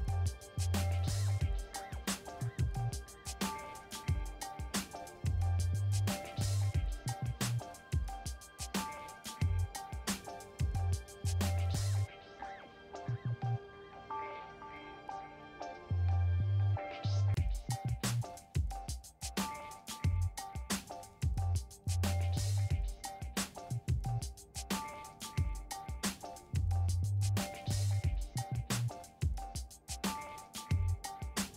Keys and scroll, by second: 0.0-1.6 typing, 4.9 alt+BackSpace, 6.4 ctrl+d, 7.6 ctrl+j, 8.6 v, 20.0-21.2 typing, 21.8 Return, 26.2 3, 28.5 Return.